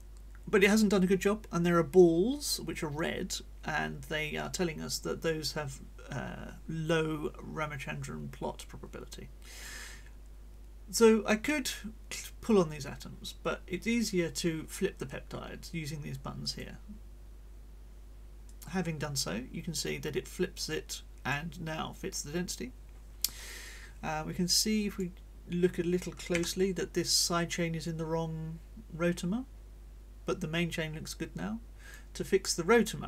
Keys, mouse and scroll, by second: 16.4 click, 18.5-21.5 drag, 23.6-25.1 drag, 26.3 g, 27.0-32.1 drag.